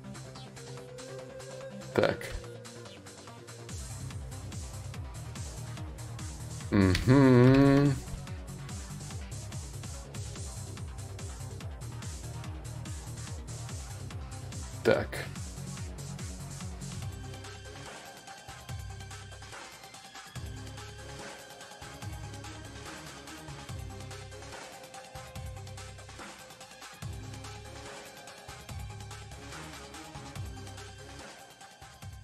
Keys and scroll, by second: 4.8 ctrl+z, 16.5 3, 17.3 4.